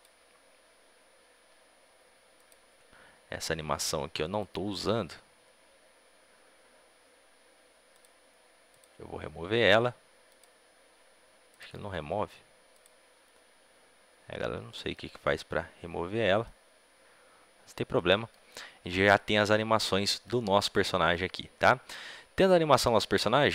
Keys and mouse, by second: 7.8-17.8 drag, 17.8-23.5 middle drag.